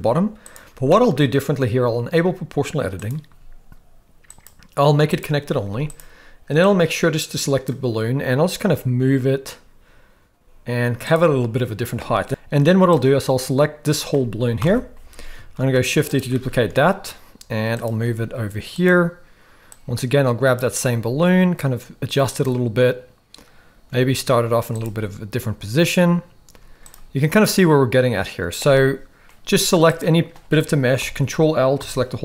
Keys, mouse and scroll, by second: 0.0 g, 0.9 shift+middle click, 3.0 click, 4.3-5.3 drag, 5.6 z, 6.6-7.7 drag, 8.4 g, 12.3 x, 12.3 g, 13.0-13.9 drag, 14.6 ctrl+l, 15.6 shift+d, 16.5 middle click, 16.7 r, 18.0 g, 19.7 click, 20.8 g, 23.9 r, 26.5 z, 31.0 ctrl+l, 31.8 KP_7.